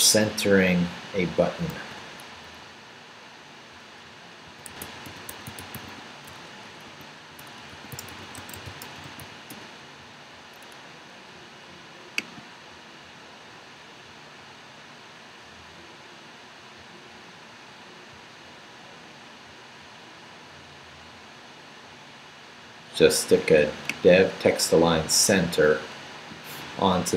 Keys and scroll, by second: 1.7 super+t, 4.2-9.7 typing.